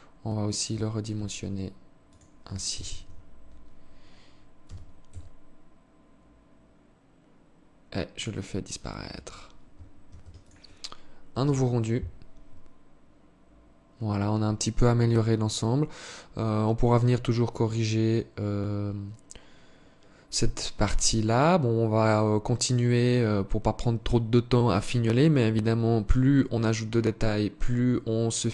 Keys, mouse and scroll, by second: 0.5 s, 2.1 z, 4.1 g, 7.9-8.3 scroll down 2, 8.5 Tab, 9.5 ctrl+s.